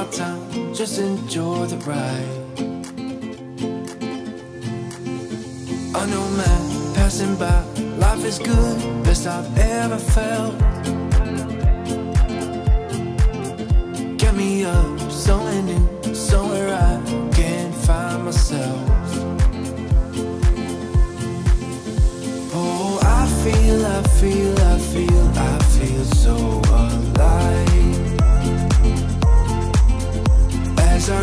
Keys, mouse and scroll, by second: 0.5 middle click, 2.6-4.7 drag, 4.7 scroll up 1, 6.0-12.8 drag, 11.5-12.5 BackSpace, 12.8 Return, 14.3 scroll down 1, 15.7-20.4 drag, 18.6 typing, 21.9 Return, 23.7 scroll up 1, 25.0-25.8 typing, 25.5-30.6 drag, 29.1 typing, 30.6 scroll up 1, 31.1-31.2 scroll down 1.